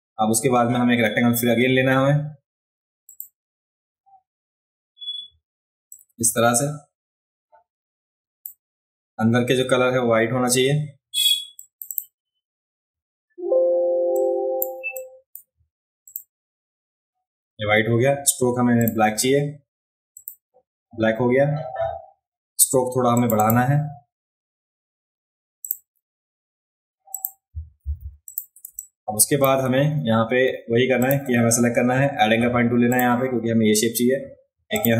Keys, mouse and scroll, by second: 3.0 click, 5.9-8.4 drag, 11.6 click, 11.7 click, 11.9 click, 14.1 click, 14.9 click, 16.0 click, 18.8 click, 20.1 click, 23.1 click, 23.4 click, 25.6 click, 27.1 click, 28.3 click, 28.6 space, 28.8 click, 31.0 click, 32.9 click, 34.7 click.